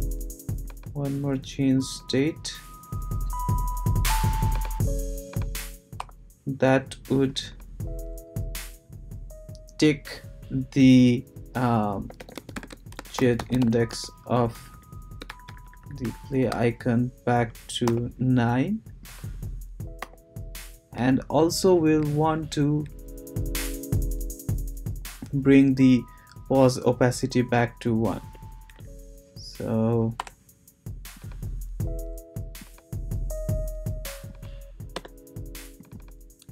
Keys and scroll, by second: 6.0 BackSpace, 11.8-14.4 typing, 14.5 Right, 15.2 shift+Right, 17.8 9, 20.0 ;, 28.1 Return, 30.2 BackSpace, 34.9 Return, 36.3-36.5 typing.